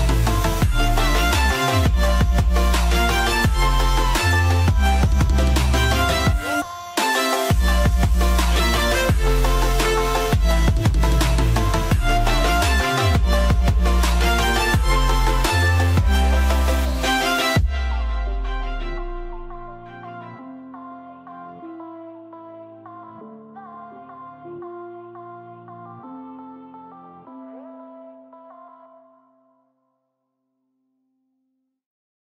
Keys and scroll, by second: 0.9 ctrl+i.